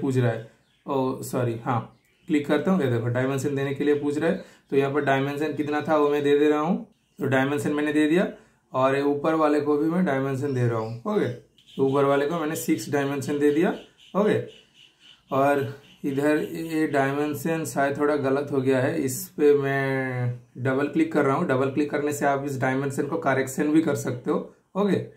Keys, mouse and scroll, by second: 0.0 super+click, 0.1 super+click, 4.9 typing, 6.9 ctrl+super+z, 6.9-7.5 typing, 8.7 ctrl+super+z, 8.7 typing, 8.8 super+click, 11.6 super+Return, 13.2-14.6 super+middle drag, 13.2 typing, 14.6 super+click, 18.3 super+right click, 19.0 super+click.